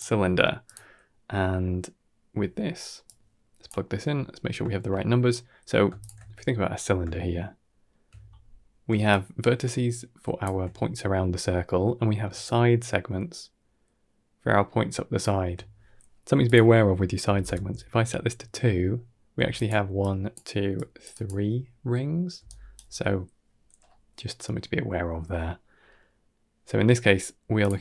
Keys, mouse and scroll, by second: 2.9-3.5 drag, 4.8 middle click, 5.4-5.7 scroll up 1, 5.9 alt+shift+click, 6.5-6.9 scroll up 5, 7.0-7.8 shift+middle drag, 9.0-10.3 shift+drag, 12.3-13.7 shift+drag, 14.1-15.2 shift+drag, 16.3-17.3 drag, 19.2-22.3 typing, 19.4 click, 19.9 click, 20.6 click, 21.0 click, 22.3 right click, 25.1 scroll down 2, 25.3 middle click, 27.5 click.